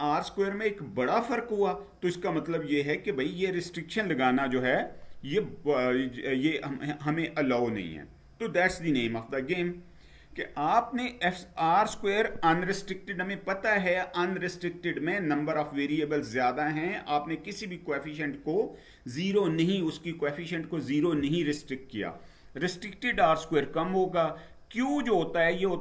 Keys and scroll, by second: 9.4 Down.